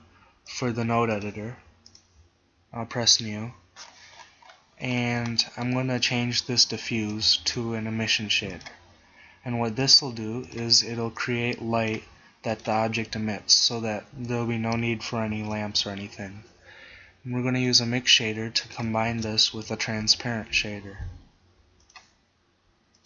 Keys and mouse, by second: 6.9 x, 7.5 shift+a, 12.6 click, 13.1 g, 15.4 shift+a, 19.1 click, 19.1 shift+a.